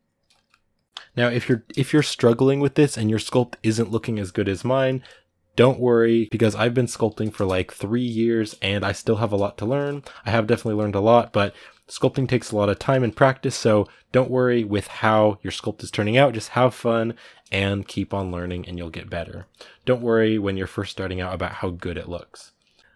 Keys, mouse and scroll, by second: 0.1 middle click, 0.5 ctrl+click, 1.1-12.1 middle drag, 12.1 click, 12.7-19.1 ctrl+middle drag, 19.1 click, 19.6 ctrl+middle click, 19.9-20.9 drag, 20.9 ctrl+middle click, 21.2 click, 21.5 ctrl+middle click, 22.1-22.9 drag.